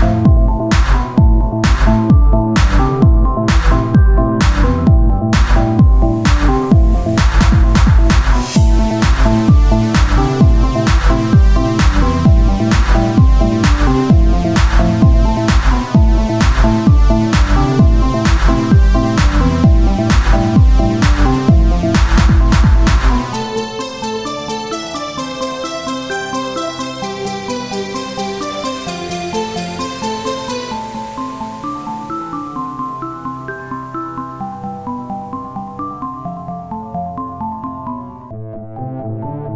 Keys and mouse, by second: 1.0 click, 1.2 z, 2.7 c, 3.2 z, 5.0 click, 5.7 ctrl+z, 8.8 z, 9.3 c, 9.7 z, 10.7-12.1 drag, 12.1 Tab, 16.1 Tab, 16.5 click, 17.0 z, 17.3 c, 17.7-19.9 drag, 18.1 z, 20.2 middle click, 20.3-21.6 right drag, 20.9 click, 20.9 middle click, 21.9 click, 23.5-25.1 right drag, 25.1 click, 25.8-27.4 right drag, 27.4 z, 28.0 z, 29.4-33.2 drag, 33.2-35.1 right drag, 34.1-35.4 drag, 35.7 z, 36.3 z, 37.4 Tab.